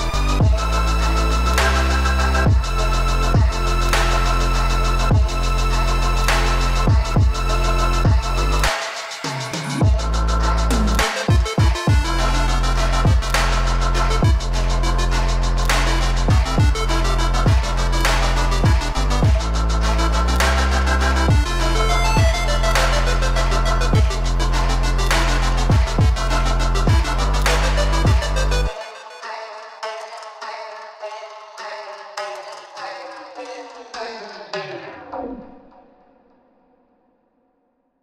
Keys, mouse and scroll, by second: 0.9 s, 10.9 ctrl+z, 13.1-35.9 drag, 36.4-38.0 drag.